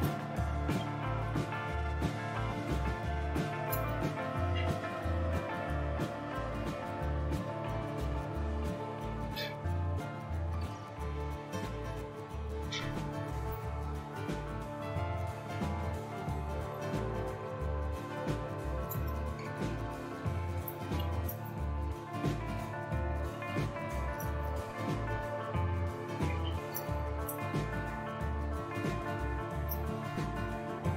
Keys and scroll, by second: 0.0-2.6 typing, 3.7 typing, 7.0-11.0 typing, 13.5 Return, 14.8-16.0 typing, 16.7 Return, 18.1-30.9 typing.